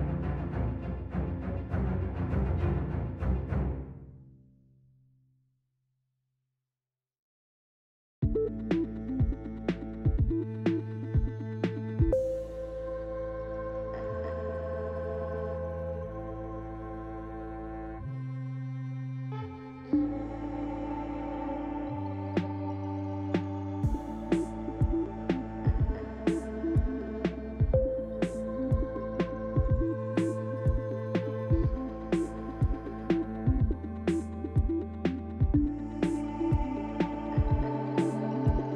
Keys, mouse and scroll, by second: 0.0 click, 0.3 Delete, 1.1 click, 2.4 shift+d, 5.1 g, 16.0 middle click, 18.3 g, 20.1 KP_7, 21.0-21.5 scroll down 2, 21.5 g, 24.1-24.5 scroll down 2, 25.1 shift+middle click, 25.1-25.6 scroll down 7, 26.3 shift+d, 29.7 scroll down 3, 30.1 shift+middle click, 31.7 click, 32.7 Delete, 33.4 click, 33.8 Delete, 34.7 click, 35.8 shift+click, 37.1 shift+d.